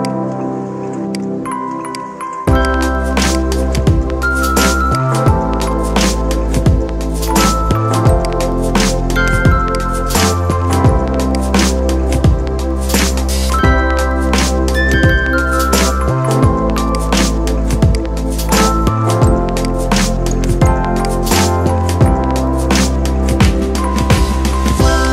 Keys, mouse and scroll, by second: 4.8-8.0 alt+drag, 8.0-9.5 drag, 9.5 right click, 11.1 click, 16.7 click, 17.7 right click, 19.5 click, 23.3-25.1 drag.